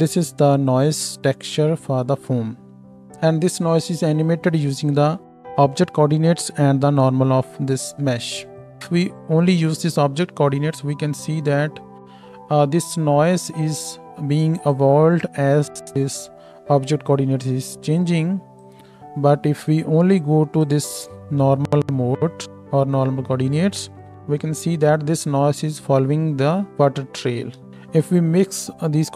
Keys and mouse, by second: 2.9-29.1 drag, 10.7 space, 14.0 space, 24.1 space, 27.6 KP_0.